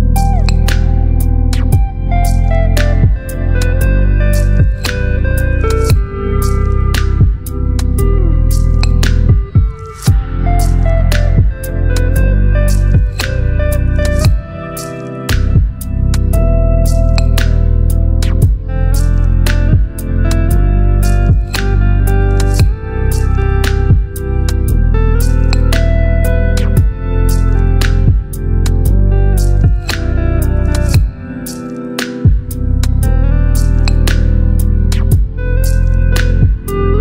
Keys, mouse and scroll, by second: 1.5 ctrl+t, 4.8 click, 6.8-8.2 shift+click, 9.6 alt+scroll up 2, 11.1 ctrl+t, 13.5-19.7 drag, 21.2-25.3 shift+drag, 25.2-26.6 drag, 26.7-29.8 shift+drag, 31.1-37.0 ctrl+drag.